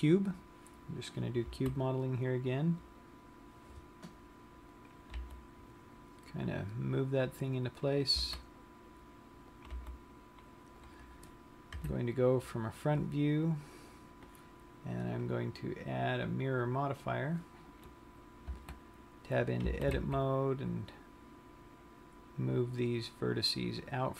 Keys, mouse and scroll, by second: 0.7 click, 2.1 s, 5.3 click, 5.5 s, 5.9 g, 8.4 click, 8.9 s, 10.4 click, 10.6 g, 11.5 click, 12.3 KP_1, 15.7 click, 17.3 click, 19.0 Tab, 20.1 g.